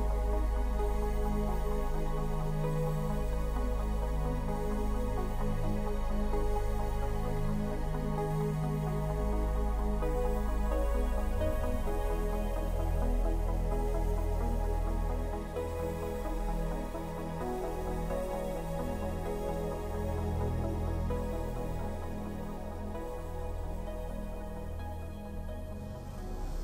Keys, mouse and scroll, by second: 4.3 right click, 10.5 super+Escape, 12.9 q, 17.1 super+click, 19.3 super+Escape, 21.8 middle click, 24.7 middle click.